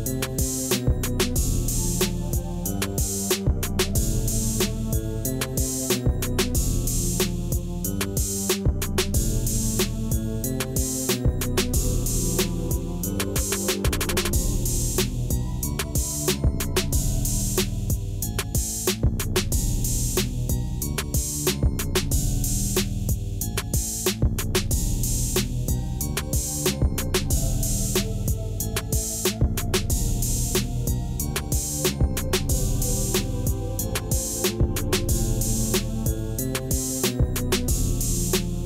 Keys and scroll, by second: 0.8 l, 4.4 g, 12.1 1, 15.3 q, 18.1 s, 23.8 s, 33.6 Tab, 35.5 alt+a.